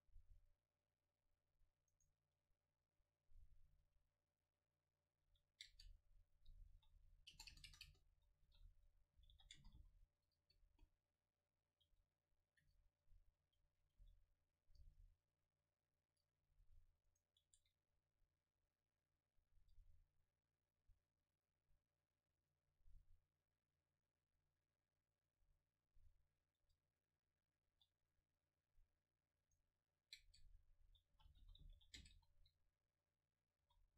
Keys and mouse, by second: 0.6-1.9 middle drag, 2.0 right click, 3.7 alt+c, 5.3 a, 5.7 space, 7.6 BackSpace, 7.9 BackSpace, 16.4 Delete, 17.1 right click, 17.6 Tab, 19.6 Tab, 20.6-24.1 drag, 24.3-26.7 drag, 26.7 Tab, 29.0 Tab, 30.4 space.